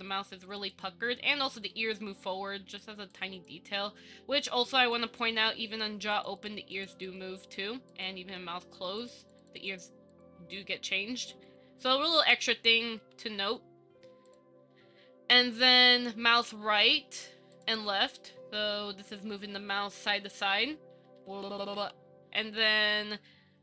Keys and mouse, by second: 0.7 click, 3.3 click, 6.3 click, 6.9 click, 8.1 click, 9.2 click, 9.4 click, 9.6 click, 10.3 click, 13.2 KP_1, 14.5 click, 16.6 click, 18.9 Up, 19.4 Down, 20.0 Up, 20.5 Down, 20.7 Up, 21.1 Down, 21.3 Up, 21.4 Down, 21.5 Up, 21.7 Down, 21.9 Up, 22.0 Down, 22.9 Down.